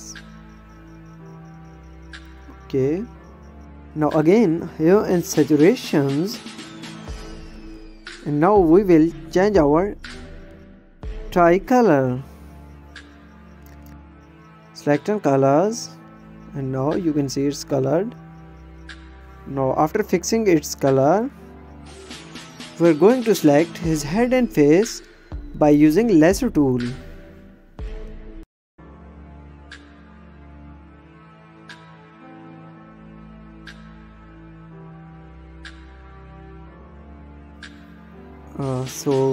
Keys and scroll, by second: 4.0 space, 11.2 ctrl+z, 27.0 ctrl+=, 27.6 ctrl+space.